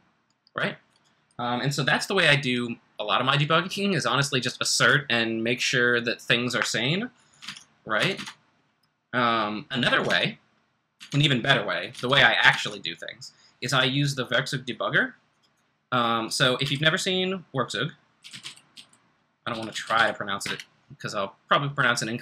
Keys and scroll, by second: 7.4 super+Tab, 8.0 super+Tab, 8.2 super+Tab, 12.1 super+Tab, 12.5 super+Tab, 16.6 typing, 17.9-20.4 typing.